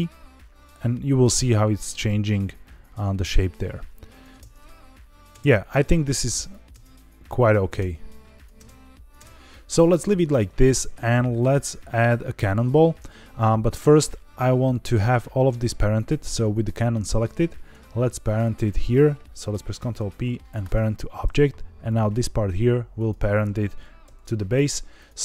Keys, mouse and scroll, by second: 4.3 space, 5.2 space, 5.5 drag, 5.9-6.4 drag, 6.6 space, 7.6 space, 8.0-8.4 drag, 8.5 space, 9.1 space, 11.4-12.1 scroll down 3, 13.1-14.3 scroll up 2, 14.3-14.8 drag, 18.1 shift+click, 19.7 ctrl+p, 21.8 click, 22.9 shift+click, 24.0 ctrl+p, 24.9 click.